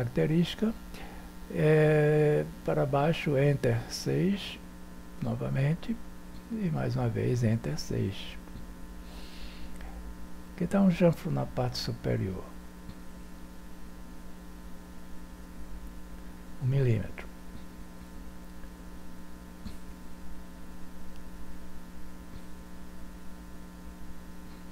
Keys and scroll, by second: 3.0 Return, 4.7 6, 6.6 6, 8.0 6, 18.1 1, 18.6 Return.